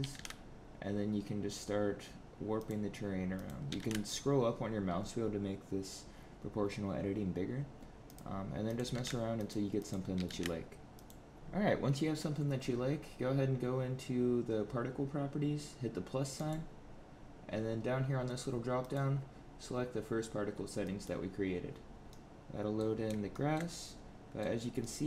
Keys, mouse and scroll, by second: 3.2 click, 3.6 g, 8.6 click, 8.7 g, 9.7 click, 10.1 g, 11.3 click, 11.3 shift+middle click, 11.3-11.9 scroll up 2, 16.3 click, 18.7 click, 22.0 middle click, 23.2 shift+middle click, 23.6 middle click, 24.7 middle click.